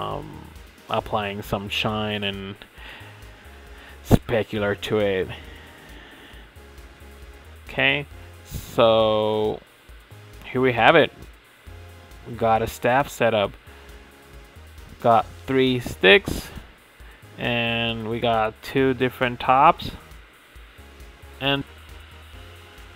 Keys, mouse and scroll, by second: 0.2 click, 0.3 middle click, 0.7 middle click, 1.0 click, 1.1 middle click, 1.7 click, 2.0 shift+middle click, 2.1 scroll up 7, 2.1 shift+middle click, 2.3 scroll down 3, 2.8 click, 3.4 click, 3.5 scroll down 3, 3.6 shift+middle click, 3.8 click, 3.9 click, 4.0 middle drag, 4.2 scroll up 2, 4.3 shift+middle click, 4.5 KP_1, 4.7 click, 4.9 scroll down 2, 4.9 shift+middle click, 5.3 h, 5.4 click, 5.5 shift+middle drag, 5.8 click, 6.2 scroll up 1, 6.2 shift+middle click, 6.8 click, 7.0-9.6 typing, 7.9 click, 8.7 ctrl+z, 8.8 shift+middle click, 9.2 scroll down 1, 9.3 shift+middle click, 9.4 click, 9.5 click, 9.7 click, 9.8 shift+middle click, 10.0 scroll up 6, 10.0 shift+middle click, 10.1 Tab, 10.1 click, 10.8 ctrl+e, 10.9 shift+middle click, 11.0 scroll up 4, 11.1 middle click, 11.2 click, 11.3 scroll down 5, 11.3 shift+middle click, 11.4 shift+middle click, 11.5 Tab, 11.6-11.9 scroll up 2, 11.9 ctrl+e, 12.3 ctrl+e, 12.4 Tab, 12.6 click, 12.7 click, 12.9 Tab, 13.1 Tab, 13.2 click, 13.3 middle click, 13.5 click, 14.3 shift+middle click, 14.5 click, 16.3 click, 16.4 ctrl+Tab, 16.5 scroll down 4, 16.5 middle click, 16.6-17.1 scroll up 7, 16.8 click, 16.9 shift+middle click, 17.1 ctrl+r, 17.4 shift+middle click, 17.4-19.7 typing, 17.6 ctrl+r, 18.1 Tab, 18.2 Tab, 18.6 Tab, 18.6 middle click, 18.7 click, 18.7 scroll down 3, 18.7 shift+middle click, 19.0 click, 19.1 scroll up 4, 19.2 ctrl+r, 19.9 Tab, 19.9-20.8 scroll down 6, 20.0 middle click, 20.3 middle click, 20.5 middle click, 20.6 click, 20.8-21.4 shift+middle drag, 22.1 middle click, 22.8 click, 22.9 middle click.